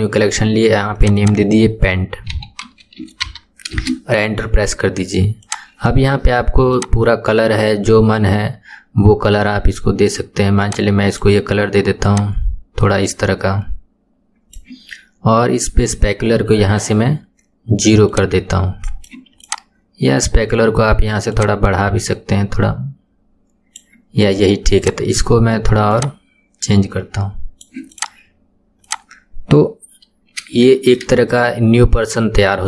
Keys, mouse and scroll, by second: 1.2-4.3 drag, 5.5 click, 15.2 scroll down 1, 16.9-17.5 scroll down 9, 18.1-19.5 drag, 21.4-24.4 drag, 24.8 click, 28.1 click, 28.3 scroll up 4, 28.9 click, 29.2-30.8 scroll down 4, 30.8-32.6 shift+middle drag.